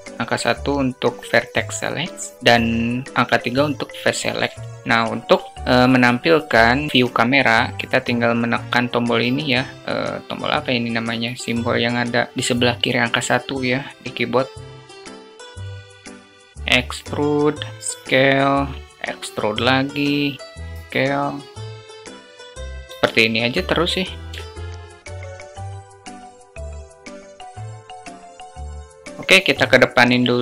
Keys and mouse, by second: 6.4 q, 6.9 `, 14.8 click, 16.0 alt+shift+click, 16.4 e, 17.8 s, 18.9 e, 20.6 s, 21.8 e, 22.5 s, 24.3 alt+shift+click, 24.6-28.0 typing, 25.5 click, 26.2 shift+middle click, 27.5 click, 27.7 alt+shift+middle click, 28.4 click, 28.5 alt+z, 28.7 alt+click, 28.7 alt+z, 28.9 Tab, 29.0 alt+click, 29.5 click.